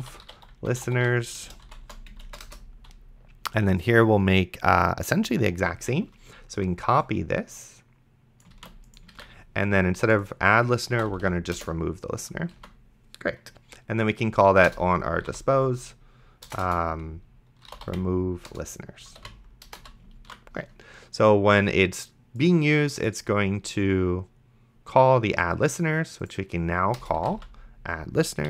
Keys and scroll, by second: 0.0-2.1 typing, 2.5 Return, 9.1 ctrl+c, 9.4 ctrl+v, 10.7-11.6 typing, 12.8 ctrl+s, 14.7 Return, 14.9-19.8 typing, 20.5 ctrl+s, 27.1 a, 27.5 d.